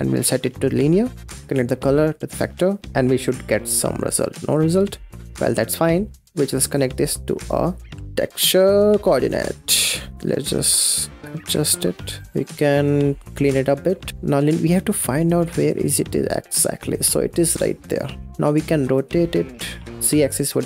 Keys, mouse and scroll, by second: 0.1-1.4 drag, 2.9 scroll down 5, 3.3 scroll up 3, 4.3 middle click, 4.6 scroll down 3, 5.0 middle click, 5.8 scroll up 4, 6.2-6.5 middle drag, 6.5 click, 6.9 click, 8.0 ctrl+t, 8.7 click, 10.2 click, 10.3-10.7 scroll down 6, 10.4 middle click, 10.7 click, 11.3 click, 11.6 click, 11.7 middle click, 12.2 click, 12.5-13.1 scroll up 4, 13.1 click, 13.6 n, 13.9 middle click, 14.1-15.3 scroll up 6, 15.3-18.3 shift+drag, 18.9-20.6 drag.